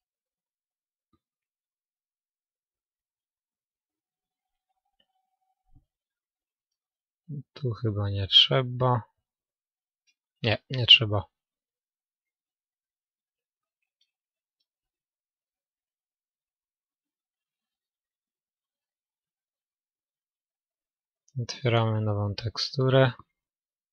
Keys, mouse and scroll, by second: 1.4-3.2 middle drag, 4.9-7.3 middle drag, 8.2-14.6 middle drag, 14.6-16.1 drag, 15.6-16.9 middle drag, 19.3-23.9 middle drag.